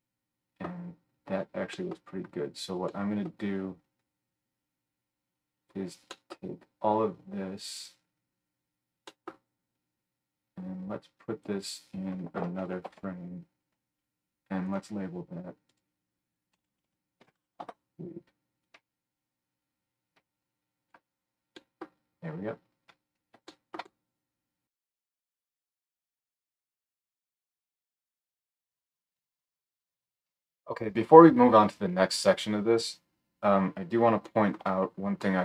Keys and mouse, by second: 4.0-14.6 drag, 12.8 ctrl+j, 14.6-18.7 middle drag, 18.7 click, 19.2-22.3 middle drag, 21.8 click, 21.8 right click, 25.4 right click, 28.6 click, 28.8 click, 28.8-35.4 middle drag, 28.8 right click.